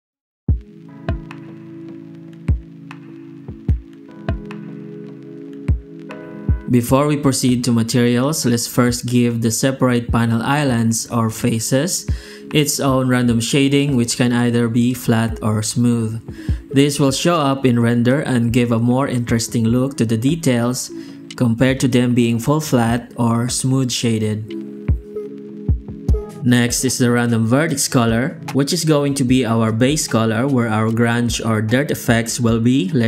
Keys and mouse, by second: 0.1 a, 0.6 Tab, 1.1 alt+shift+z, 2.0 Tab, 2.7 alt+shift+z, 4.0 alt+a, 4.4 Tab, 5.7 alt+shift+z, 7.1 shift+q, 18.4 alt+a, 20.2 click, 20.5 Tab, 20.9 alt+shift+z, 21.3 alt+a, 21.5 Tab, 22.0 alt+a, 23.5 click, 24.2 shift+g, 24.8 alt+shift+z, 25.4 shift+q, 28.8 F9, 31.8 F9.